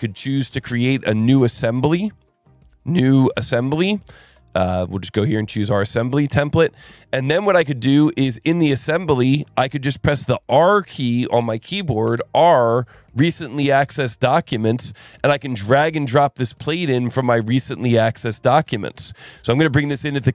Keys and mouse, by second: 0.6 click, 5.2 click, 6.0 click, 8.8 click, 9.3 click, 12.0 r, 15.7 click, 19.6 click.